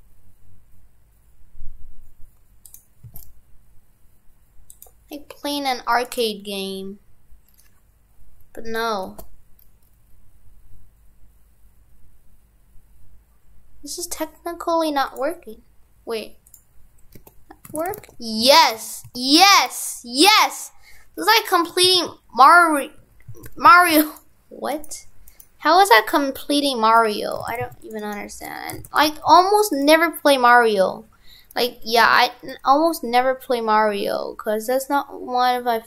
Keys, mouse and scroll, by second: 6.1 right click, 16.5 click, 17.2 Tab, 17.7 shift+f, 24.8-27.3 right click, 27.4 shift+f, 28.0 right click, 28.4 Tab, 28.8 shift+f.